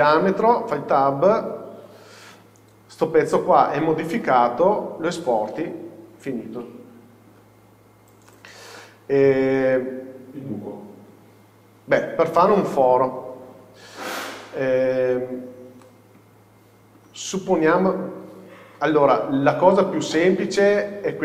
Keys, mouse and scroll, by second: 0.8 Tab, 1.2 scroll down 1, 2.3 z, 2.5 KP_6, 3.6-4.0 scroll up 1, 4.0 scroll down 1, 5.4-7.9 middle drag, 7.7 scroll down 1, 9.1-9.8 scroll up 1, 12.5-12.9 scroll down 1, 14.8 scroll up 1, 15.9 middle click, 18.0 scroll down 1.